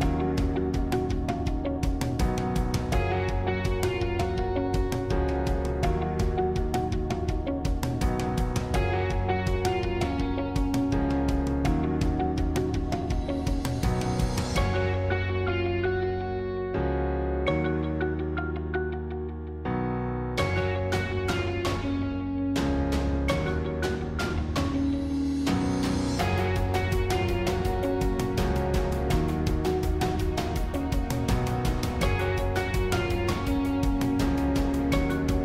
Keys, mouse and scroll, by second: 0.8 click, 2.6 click, 3.4 s, 6.7 g, 9.3 click, 9.7-11.4 middle drag, 11.4-14.0 scroll down 2, 14.0 click, 15.0-16.1 middle drag, 16.1 scroll down 2, 16.2-19.3 middle drag, 19.9 scroll down 1, 19.9-24.7 middle drag, 24.7 click, 27.4-30.4 middle drag, 30.6-31.0 scroll up 3, 31.0-32.6 middle drag, 32.6-33.2 scroll down 1, 33.2-33.8 scroll down 1, 33.8 middle click, 34.4-34.8 scroll down 3, 34.8 middle click.